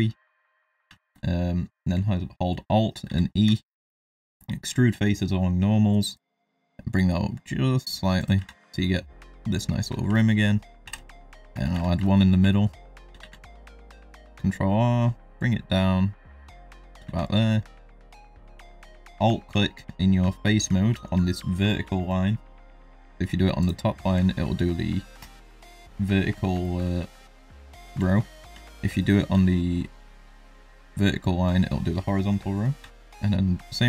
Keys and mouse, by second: 1.0 shift+middle click, 3.0 alt+e, 8.4 Tab, 8.6 middle click, 9.1-9.7 middle drag, 10.1 shift+middle drag, 10.8 KP_1, 11.5 shift+middle drag, 11.7 Tab, 12.0 shift+middle click, 12.5 shift+middle click, 13.2 ctrl+r, 17.0 3, 18.0 alt+click, 26.6 shift+middle click, 27.1 ctrl+middle click, 28.0 shift+middle click, 28.6 ctrl+shift+middle click, 28.7 shift+KP_Decimal, 29.3 ctrl+middle click, 30.6 alt+click.